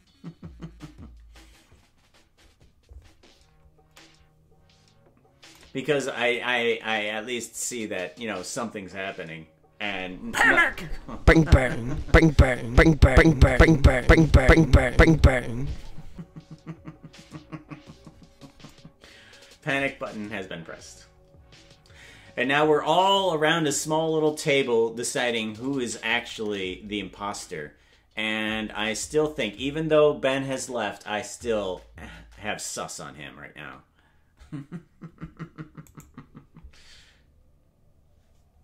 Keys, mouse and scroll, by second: 35.9 right click.